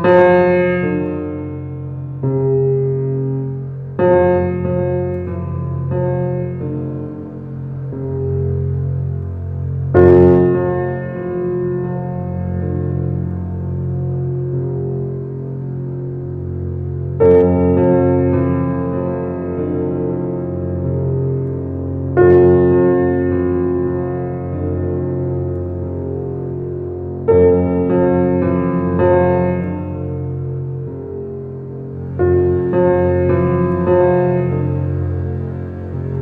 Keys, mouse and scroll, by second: 2.3 scroll down 1, 2.6 click, 2.9-3.3 middle drag, 3.3-3.7 scroll down 4, 3.7-6.5 middle drag, 6.5 shift+s, 9.3 shift+a, 10.7 middle click, 11.7 s, 15.1 g, 17.4 s, 19.8 alt+middle click, 20.7 g, 23.5 alt+middle click, 23.8-24.8 scroll up 9, 24.2 shift+middle drag, 24.8-25.3 shift+middle drag, 25.3 g, 27.3 scroll down 4, 27.5-27.9 middle drag, 27.9-28.5 scroll down 1, 28.5-29.0 shift+middle drag, 29.0-29.8 scroll up 1, 29.8 s, 33.8 alt+middle click, 34.5 scroll down 6, 34.8 middle click, 35.6 scroll up 3, 35.9-36.2 middle drag.